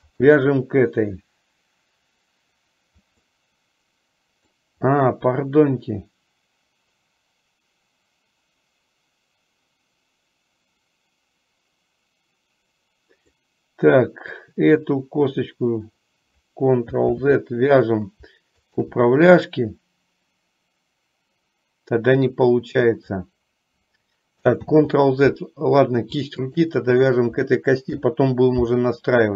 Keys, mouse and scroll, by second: 3.5-4.7 middle drag, 13.5-14.5 middle drag, 17.2 ctrl+z, 18.7 click, 22.7 middle click, 24.7 ctrl+z, 26.5 shift+click, 28.0 ctrl+p.